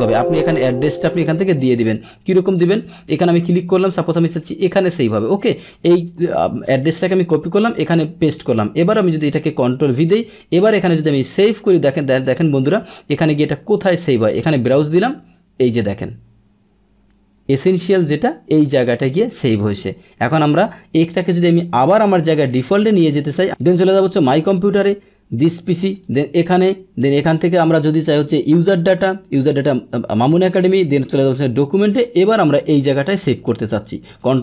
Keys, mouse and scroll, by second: 1.1 click, 2.4 click, 3.8 click, 4.0 click, 5.1 click, 6.2 ctrl+c, 6.6 alt+Tab, 7.7 ctrl+v, 9.0 click, 10.7 click, 12.0 click, 14.2 click, 20.9 click, 21.7 Escape, 22.8 click, 23.4 click, 24.4 click, 25.7 click, 25.9 click, 28.5 click, 28.6 click, 29.4 click, 29.6 click, 31.1 click, 31.2 click, 32.8 click, 33.7 click, 34.1 ctrl+c.